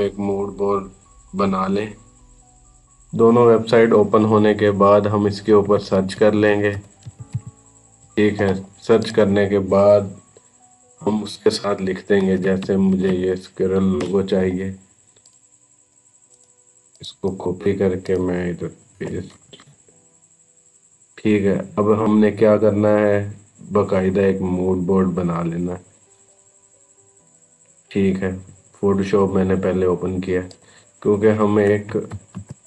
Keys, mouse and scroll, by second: 5.2-7.7 typing, 8.8 click, 11.1 click, 12.0-13.4 typing, 13.8 Return, 15.1 click, 16.1 right click, 16.8 click, 18.8 ctrl+v, 19.3 Return, 23.8 scroll down 1, 25.4 scroll down 1, 26.1 scroll up 1, 27.0 click, 30.3 click, 31.9 ctrl+n.